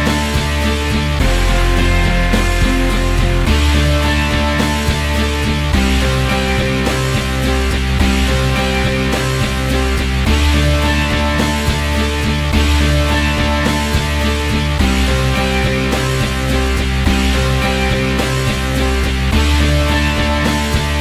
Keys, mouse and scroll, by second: 0.2 middle click, 0.2 click, 0.4-1.9 middle drag, 1.9-3.0 drag, 3.0 middle click, 3.1 t, 3.3 f, 3.5 click, 4.4 ctrl+z, 4.5-7.8 drag, 7.8 middle click, 7.9 click, 8.6 middle click, 8.7-10.9 drag, 10.9-11.9 middle drag, 11.9 click, 12.5-13.2 scroll up 1, 13.2-13.8 drag, 13.8 middle click, 13.9 f, 14.3 click, 14.5 ctrl+z, 14.9-18.6 drag, 18.6 scroll down 7, 18.9 alt+click, 19.2-19.8 scroll up 6, 19.5 alt+click, 19.8 scroll down 1, 20.0 alt+click, 20.1 scroll up 1, 20.2 alt+click, 20.4 f, 20.7-21.0 drag.